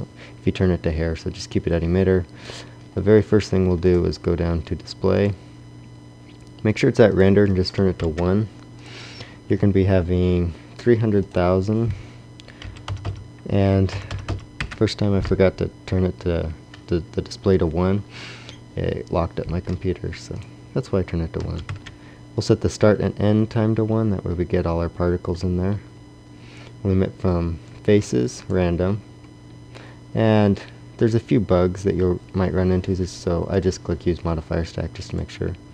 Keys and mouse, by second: 11.2-12.7 drag, 12.9 KP_0, 14.1 KP_0.